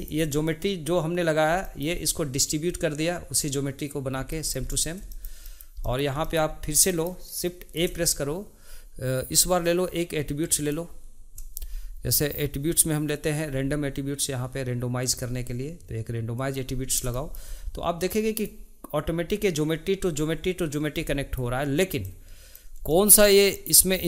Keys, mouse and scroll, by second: 7.7 shift+a, 17.1-18.1 shift+middle drag, 18.1 click, 21.0-22.0 shift+middle drag, 22.0 click, 22.9-24.0 shift+middle drag.